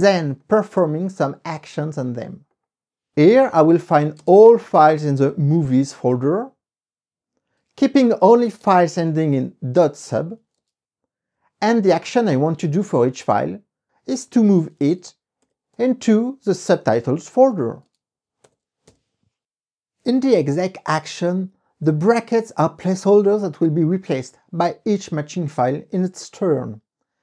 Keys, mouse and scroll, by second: 0.6 right click, 2.7 click, 3.3-5.4 typing, 7.6-11.0 typing, 7.8 KP_Subtract, 12.1-15.3 typing, 15.5 alt+', 16.6-18.0 typing, 19.0 ;.